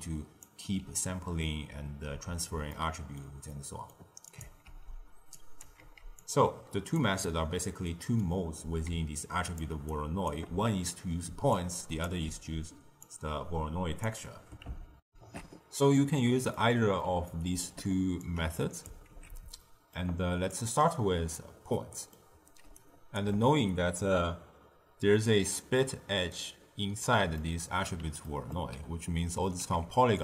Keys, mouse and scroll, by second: 2.0 ctrl+x, 2.6-4.2 ctrl+middle drag, 4.2 click, 4.6 ctrl+x, 5.3 drag, 5.8 ctrl+x, 6.1 click, 7.2-8.8 middle drag, 8.8-12.1 typing, 9.1 click, 9.8 right click, 11.5-12.0 drag, 13.0 click, 15.0 ctrl+alt+shift+q, 16.4-18.1 middle drag, 18.1 click, 19.0 ctrl+x, 19.5-20.4 ctrl+middle drag, 20.4 drag, 21.7 middle click, 22.6 d, 22.7 right click, 23.1 d, 24.6 d, 27.3-29.5 middle drag, 29.5 z.